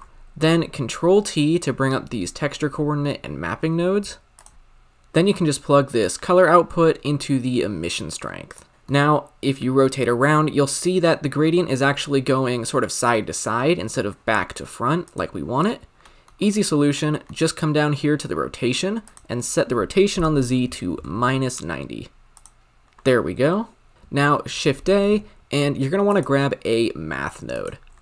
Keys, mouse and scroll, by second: 0.9 ctrl+t, 4.5-6.3 drag, 8.7-10.0 middle drag, 10.0-10.6 scroll up 4, 10.7-15.0 middle drag, 15.0 click, 16.0-22.3 middle drag, 22.8-23.9 middle drag, 23.9-26.2 drag, 26.2 shift+a, 27.9 scroll down 1.